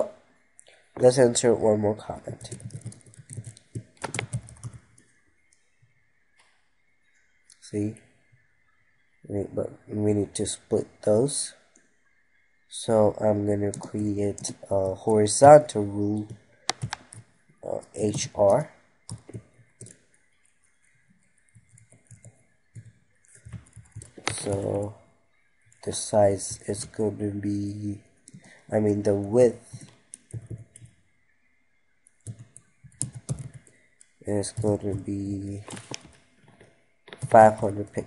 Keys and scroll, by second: 23.0 ctrl+Right, 26.8 ctrl+s.